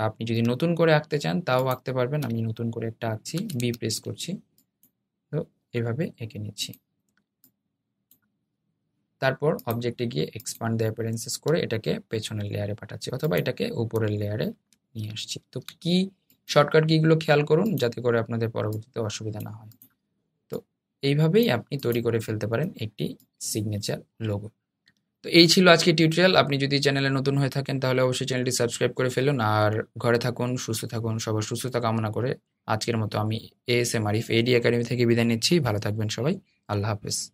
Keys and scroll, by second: 3.6 b, 15.2 super+}.